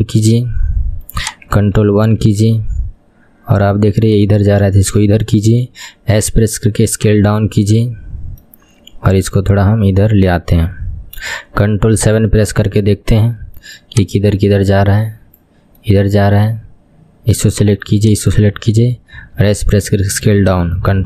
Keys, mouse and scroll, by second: 2.0 ctrl+KP_1, 2.7-3.2 scroll up 4, 3.2-4.1 scroll down 3, 4.1 click, 5.7 s, 7.5-9.3 middle drag, 9.3 click, 10.7-12.2 middle drag, 12.2 ctrl+KP_7, 12.8-14.0 scroll up 4, 14.0 click, 16.0-17.6 middle drag, 17.6-18.5 drag, 19.4 s.